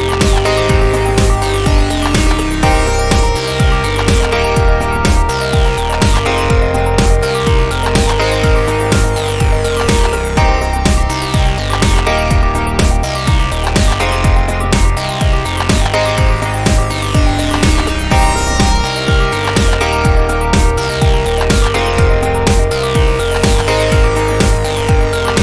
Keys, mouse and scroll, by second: 0.1-1.8 right drag, 0.5 Tab, 1.8 KP_1, 2.6 middle click, 3.0-5.0 middle drag, 4.6 click, 6.5-11.0 middle drag, 6.7 Tab, 12.2-14.6 middle drag, 13.3-18.0 right drag, 14.6 x, 18.2 m, 21.2-23.1 middle drag, 21.7 click, 23.3 middle drag, 23.4 middle click, 23.6-24.6 middle drag, 24.6 click.